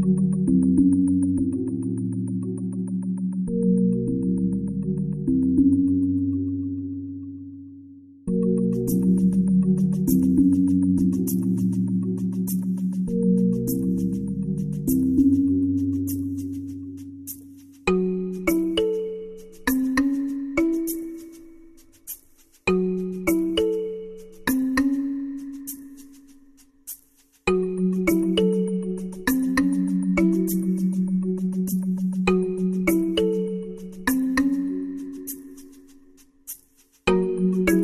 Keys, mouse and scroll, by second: 2.9-5.3 drag, 3.2 i, 8.4-9.4 drag, 11.2 g, 20.6 i, 23.2-25.1 drag, 26.1-27.6 drag, 28.1 e, 29.7-31.4 drag.